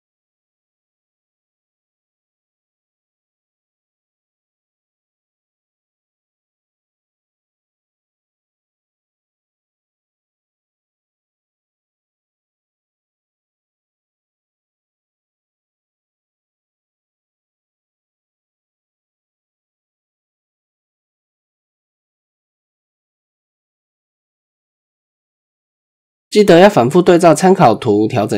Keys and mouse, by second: 0.0 g, 2.5 shift+middle drag, 3.0-3.4 middle drag, 4.5 alt+click, 5.4 middle click, 5.9 KP_1, 7.7 g, 14.3 middle click, 15.3 ctrl+click, 15.8 KP_1, 17.1 g, 18.9 click, 19.4 g, 23.9 click, 25.3 click, 25.8 shift+middle click, 27.1-28.3 drag.